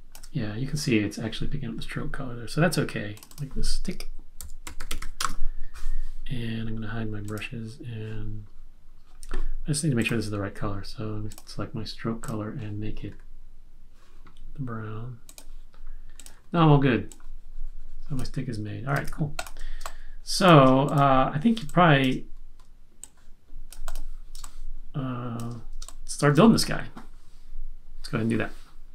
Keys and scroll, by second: 4.1-5.4 typing, 6.7 typing, 18.9 super+z, 19.8 space, 21.5 space, 21.6 space, 24.3 space, 25.8 space.